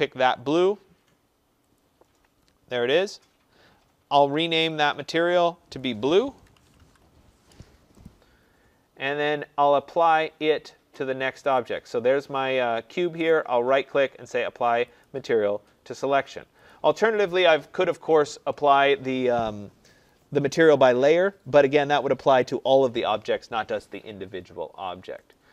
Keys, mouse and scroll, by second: 1.7 click, 4.4 click, 4.7 click, 5.7 click, 6.3-7.3 typing, 8.1 click, 10.9 click, 13.3 right click, 15.0 click, 16.9 click, 25.3 click.